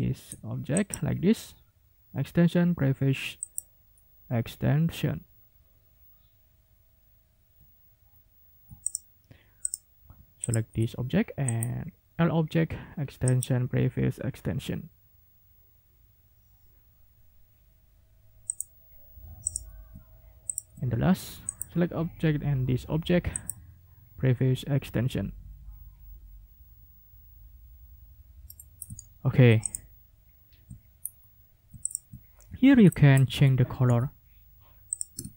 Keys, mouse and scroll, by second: 0.7 click, 3.4 click, 7.7-8.3 ctrl+scroll down 4, 8.8 ctrl+click, 9.6 click, 10.4 shift+click, 11.5 click, 13.2 click, 18.5 click, 19.4 click, 20.5 shift+click, 21.5 click, 23.3 click, 28.4 middle click, 29.6 ctrl+middle click, 31.0-31.6 ctrl+scroll up 4, 31.8 ctrl+middle click, 32.3 ctrl+scroll down 2, 32.8 ctrl+middle click, 33.9 g, 34.9 ctrl+click.